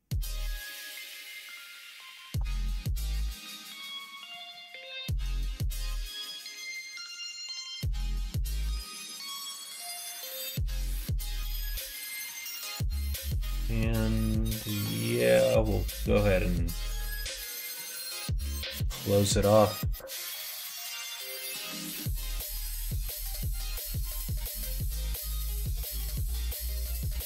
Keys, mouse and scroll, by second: 0.3 alt+shift+click, 1.3 alt+shift+click, 2.2 alt+shift+click, 2.5 x, 3.9 middle click, 4.5 middle click, 5.2-6.3 middle drag, 7.0 click, 7.7 3, 8.1 click, 8.8 middle click, 10.5 middle click, 10.8 middle click, 11.7 2, 19.5 alt+click, 20.1 alt+click, 20.9 alt+click, 21.8 ctrl+f, 23.4 middle click.